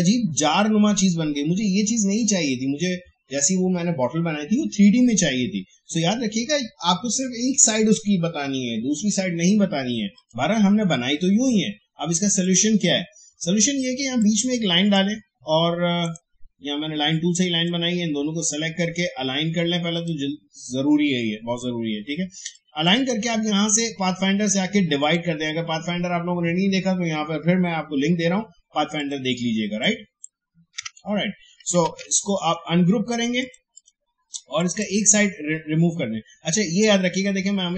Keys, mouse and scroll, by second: 10.1-20.0 drag, 22.5-25.0 drag, 29.0 click, 30.8 Delete, 31.8 ctrl+z, 32.3 right click, 33.4 click.